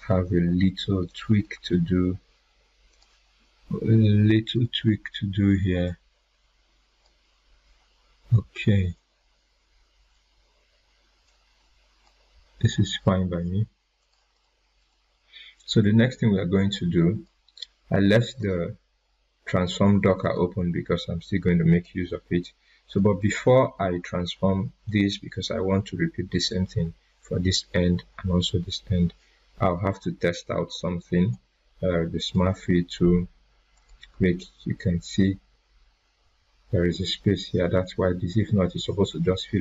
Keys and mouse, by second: 1.0 click, 2.7 right click, 2.9-7.1 drag, 10.0 drag, 14.3 right click, 16.7-17.3 drag, 22.8 click, 30.7-31.3 drag.